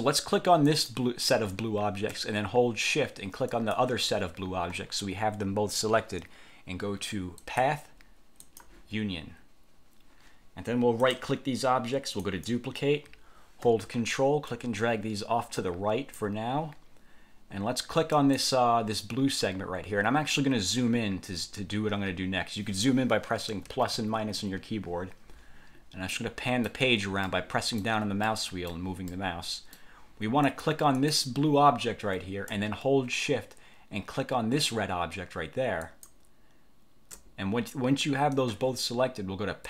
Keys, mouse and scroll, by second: 0.8 click, 3.7 shift+click, 7.5 click, 8.5 click, 11.1 click, 12.3 click, 14.6-16.5 ctrl+drag, 18.3 click, 23.6 =, 23.8 -, 24.1 =, 26.3-27.0 drag, 27.4-28.1 drag, 28.4 click, 29.2-30.1 drag, 30.5 click, 31.1 click, 35.9 shift+click.